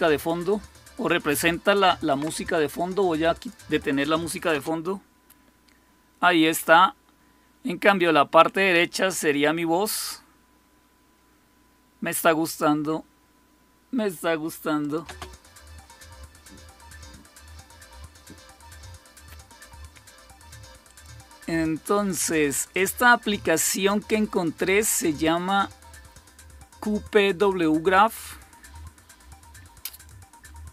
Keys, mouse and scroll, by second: 3.2 click, 4.4 space, 14.7 click, 15.0 space, 20.8 click, 22.6 click, 24.5 click, 29.8 click.